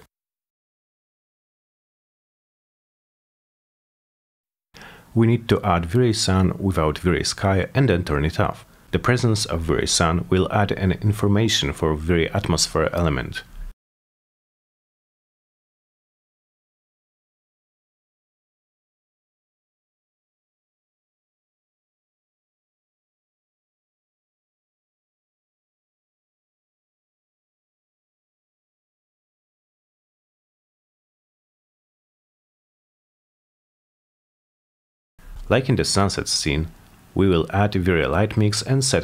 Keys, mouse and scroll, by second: 0.9 click, 1.4 click, 1.8 t, 2.3 g, 2.5 middle click, 2.7 middle click, 2.9 middle click, 3.4 middle click, 3.7 scroll up 1, 3.7 middle click, 3.9 middle click, 4.7 middle click, 5.0 scroll down 1, 5.3 middle click, 7.1 click, 8.4-10.0 drag, 11.0 click, 12.5 click, 13.4 click, 13.6-16.0 typing, 14.9 click, 15.0 click, 16.1 Return, 17.4 click, 17.7 alt+middle click, 18.1 w, 18.4 click, 19.1 alt+middle click, 20.4 click, 20.9 click, 21.2 c, 21.7 click, 23.1 click, 24.0 click, 27.4 click, 28.3 click, 32.0 click, 34.2 click, 34.9 click, 36.2 F10, 37.4 click, 38.2 click.